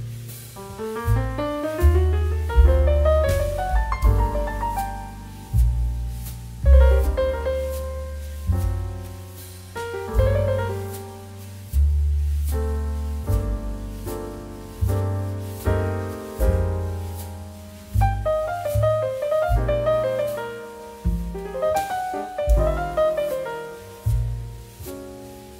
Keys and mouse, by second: 4.7 click, 10.4 click, 16.0 click, 18.7 right click, 21.0 click.